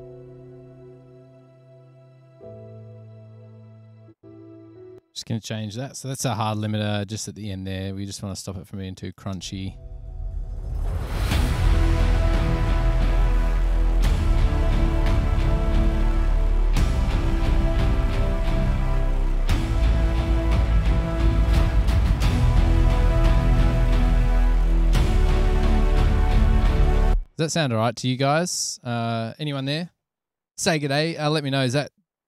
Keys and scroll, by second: 5.1 space, 6.4 super+=, 8.4 F7, 11.5 super+=, 27.3 space.